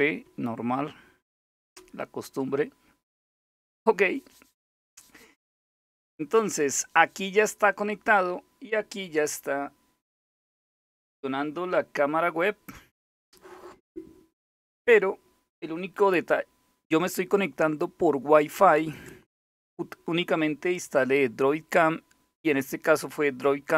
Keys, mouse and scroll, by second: 1.3 Return.